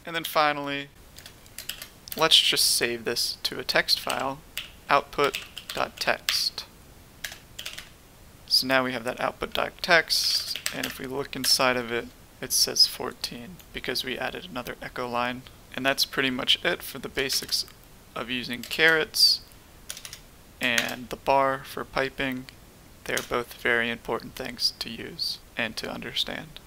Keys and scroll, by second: 1.1-2.1 typing, 3.7-8.1 typing, 9.8-11.4 typing, 18.7 typing, 19.8-21.2 typing.